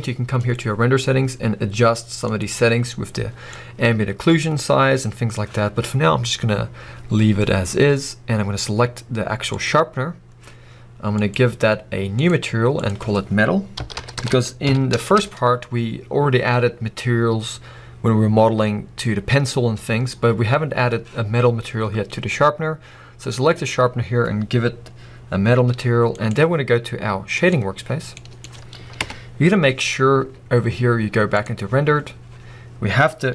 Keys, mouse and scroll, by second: 0.4 click, 8.0 scroll down 1, 9.5 click, 15.4 Return, 21.5-25.3 scroll up 2, 25.7 g, 26.4 right click, 27.4 click, 28.1-29.2 middle drag, 29.0 KP_0, 29.9 scroll up 1, 30.2 z, 32.1 scroll down 1, 32.3 scroll up 1.